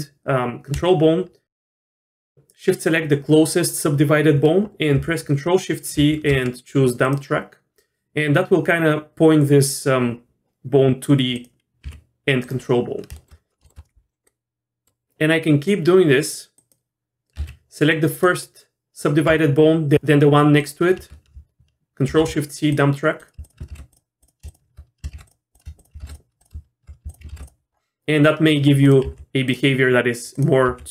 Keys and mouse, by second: 6.0 ctrl+shift+c, 11.3 click, 11.8 g, 13.1 shift+middle click, 13.6 shift+middle drag, 14.2 middle click, 15.0 ctrl+z, 16.6 click, 17.4 ctrl+z, 18.1 click, 22.1 ctrl+shift+c, 23.2 drag, 23.4 shift+click, 23.7 ctrl+shift+c, 24.2 click, 24.5 shift+click, 25.2 ctrl+shift+c, 25.5 click, 26.0 ctrl+shift+c, 27.3 ctrl+shift+c, 28.8 click, 29.0 g, 30.3 click, 30.7 g.